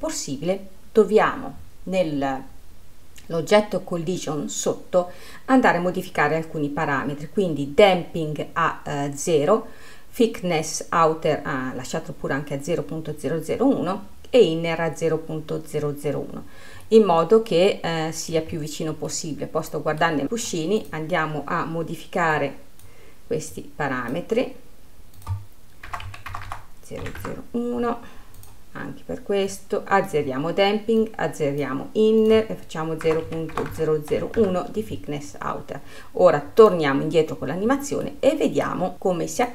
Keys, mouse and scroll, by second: 6.3-9.5 scroll down 2, 17.0-17.5 scroll down 2, 17.5-19.2 middle drag, 19.2-19.7 scroll up 3, 19.7-21.4 middle drag, 21.4 click, 22.9-27.1 drag, 27.1 KP_0, 29.0 click, 30.1-34.3 drag, 34.3 KP_0, 35.8 scroll down 4, 36.3-37.2 scroll up 1, 37.2-38.6 drag, 38.6 middle click, 38.9-39.5 scroll up 2.